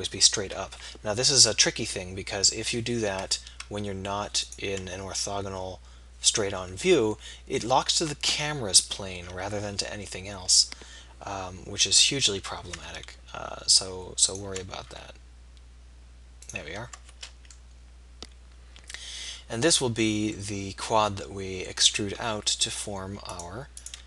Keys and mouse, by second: 2.6 k, 19.5 middle click, 22.4-24.0 middle drag.